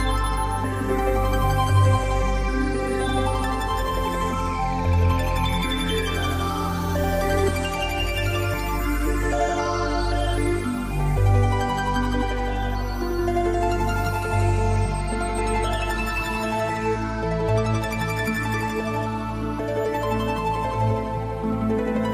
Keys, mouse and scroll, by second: 1.4 click, 9.1-9.8 scroll down 1, 16.2-19.5 scroll down 7, 19.5 s.